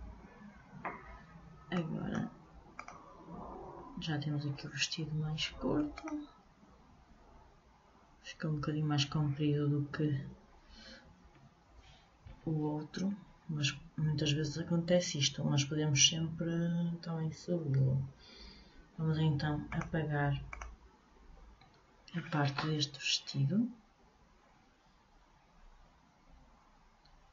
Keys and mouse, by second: 1.9-4.7 drag, 6.1-7.7 drag, 7.8 click, 19.8-21.7 drag, 21.7-27.3 middle drag.